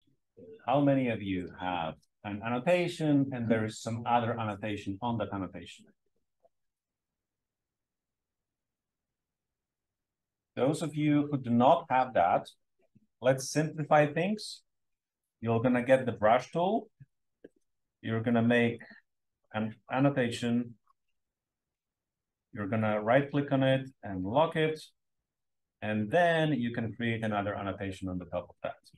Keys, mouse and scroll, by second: 0.0-1.3 drag, 0.0-1.0 scroll up 1, 0.0 space, 1.0 scroll up 1, 15.1 click, 16.8 space, 17.0 click, 17.9 click, 18.7-21.0 drag, 21.5-24.4 scroll up 1, 22.7-24.4 right drag, 24.4 click, 24.4-26.0 scroll up 1, 26.1-27.3 drag, 27.9-28.7 scroll up 1.